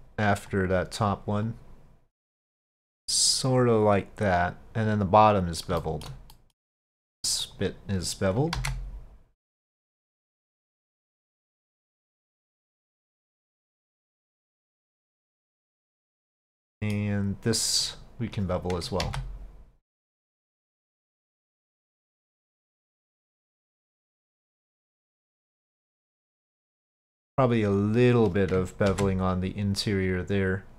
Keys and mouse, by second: 0.6 click, 1.5-5.5 drag, 5.8 shift+middle click, 6.4 middle click, 7.0 click, 7.5 click, 8.6 ctrl+b, 11.3 click, 12.7 click, 13.1 click, 13.6 click, 14.5-16.1 middle drag, 16.1 click, 19.1 ctrl+b, 22.8 click, 23.5 click, 24.4-25.4 middle drag, 26.4 middle click, 27.8 click, 28.9 ctrl+b.